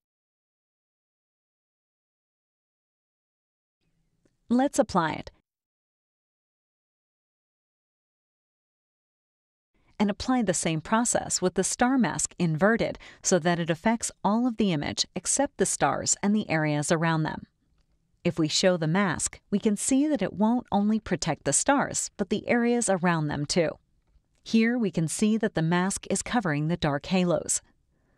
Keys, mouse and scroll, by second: 2.5-5.3 drag, 8.8 click, 11.8 click, 12.9 click, 14.8-16.2 drag, 17.0 click, 17.9 click, 19.9 middle click, 20.0 scroll down 1, 20.3 scroll up 2, 20.4 scroll down 2, 20.9 scroll up 2, 21.0 scroll down 2, 21.6 space, 21.7 click, 22.5 scroll down 2, 24.5 click, 25.2 click, 26.1 click, 26.7 click.